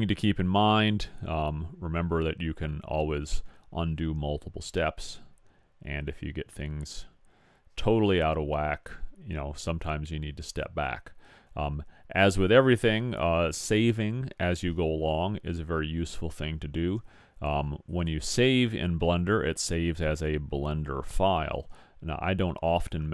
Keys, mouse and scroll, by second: 0.3-0.8 middle drag, 0.9-2.3 middle drag, 17.9-19.8 drag.